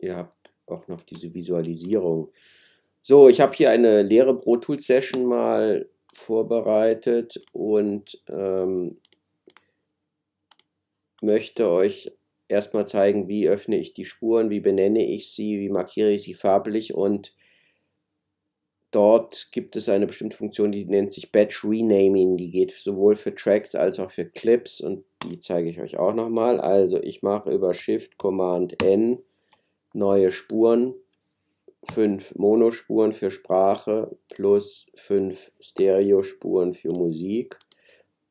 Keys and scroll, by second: 28.7 shift+super+n.